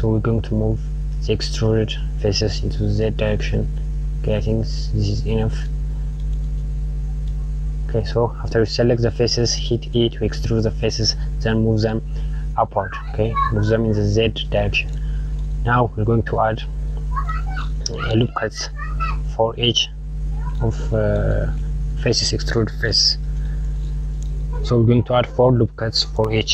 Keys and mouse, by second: 5.6 click, 14.3 click, 23.8 click.